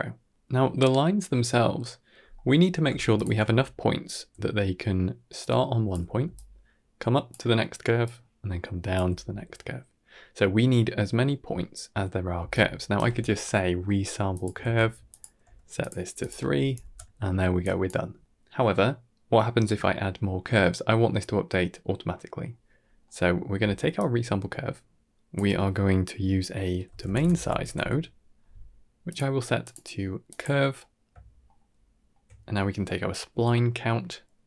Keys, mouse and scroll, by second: 2.2-2.6 middle drag, 3.0 alt+shift+click, 4.2-5.3 d, 5.3 click, 5.8 d, 6.1 d, 6.2 click, 7.2-8.9 typing, 7.9 click, 12.3 d, 12.4 right click, 12.8 d, 13.7 middle click, 14.2 click, 14.5 shift+d, 15.3 g, 16.1 click, 17.5-17.8 drag, 18.0 g, 22.6 scroll down 2, 22.9-23.2 middle drag, 23.8-29.0 drag, 29.5-30.3 drag, 30.7 middle click, 31.4 ctrl+middle click, 33.0-34.4 drag.